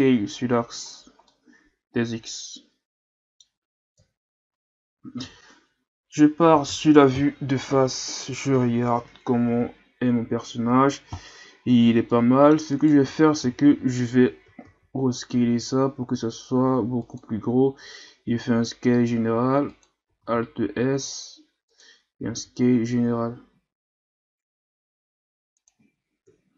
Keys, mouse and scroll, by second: 0.9-1.3 scroll down 4, 1.3-3.9 middle drag, 3.9 KP_3, 5.2 KP_1, 10.3-11.6 scroll up 3, 11.6-12.1 ctrl+scroll up 3, 12.1-12.7 middle drag, 12.7 right click, 13.0 Tab, 13.4 a, 13.7 a, 14.6 alt+s, 18.1 s, 20.2 alt+s, 22.3 s, 26.3 KP_3.